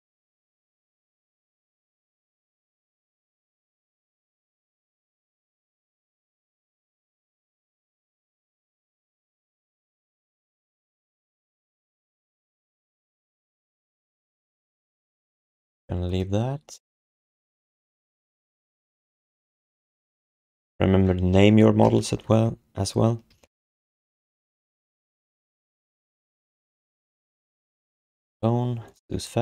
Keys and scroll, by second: 0.9 g, 2.6 g, 3.2 g, 4.4 z, 5.4 alt+shift+d, 6.0 ctrl+z, 6.2 ctrl+z, 6.4 ctrl+z, 6.6 ctrl+z, 6.9 ctrl+z, 7.2 ctrl+z, 7.5 ctrl+z, 8.1 ctrl+z, 8.3 ctrl+z, 9.7 ctrl+z, 9.9 ctrl+z, 10.1 ctrl+z, 10.3 ctrl+z, 10.4 ctrl+z, 10.6 ctrl+z, 10.8 ctrl+z, 12.9 alt+shift+d, 13.3 alt+q, 13.9 w, 23.0-24.6 typing, 24.8 Return, 27.4 BackSpace, 27.7 Return.